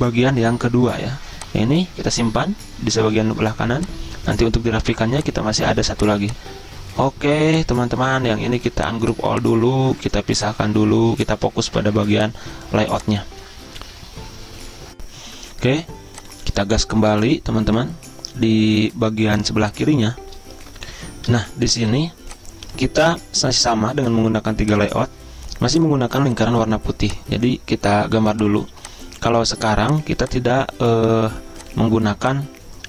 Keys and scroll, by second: 20.8 F10, 20.9 F4, 21.0 F10, 22.0 z.